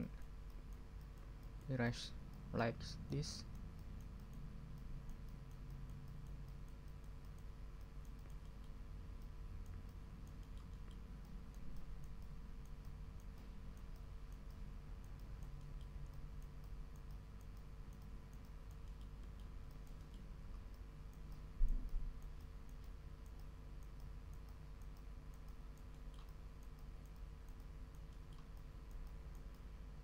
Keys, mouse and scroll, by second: 0.5-0.9 drag, 1.0-1.3 drag, 1.5 click, 1.8-2.2 drag, 2.3-2.7 drag, 2.8-3.2 drag, 3.4 click, 4.7-7.5 drag, 7.7-8.4 drag, 8.4 middle click, 8.6 click, 8.7 middle click, 9.2-10.4 drag, 11.0 click, 11.2-14.0 drag, 15.6-16.0 scroll down 2, 18.8 scroll up 2, 19.1 click, 19.4 click, 19.7-20.3 drag, 20.3 ctrl+scroll up 2, 20.7-25.9 ctrl+drag, 25.9 middle click, 26.2-30.0 drag.